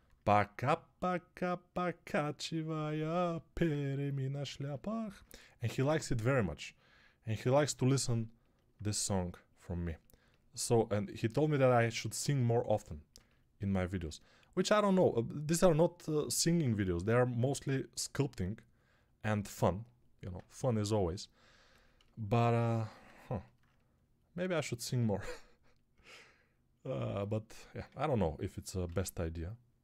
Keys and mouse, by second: 27.7 Tab, 28.7 ctrl+r.